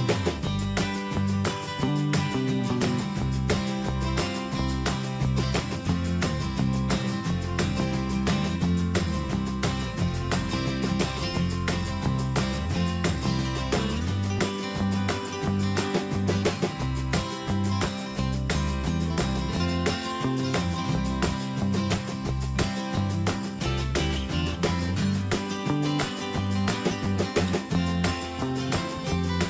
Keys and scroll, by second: 8.7 shift+F5, 9.3 Return, 10.0 ctrl+d, 13.0 shift+F5, 13.3 Return, 15.4 shift+F5, 15.6 Return, 16.3 ctrl+d, 16.5 ctrl+space, 19.4 shift+F5, 20.2 Return, 22.2 shift+F5, 22.6 Return, 23.5 ctrl+d.